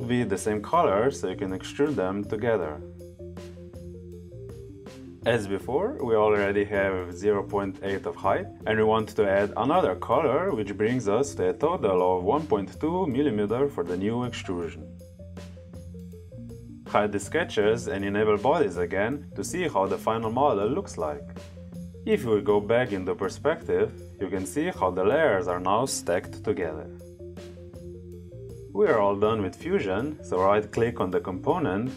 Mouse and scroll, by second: 1.3 click, 2.9 click, 6.1 click, 14.6 click, 18.1 click, 19.5 click, 22.3 click, 29.8 right click.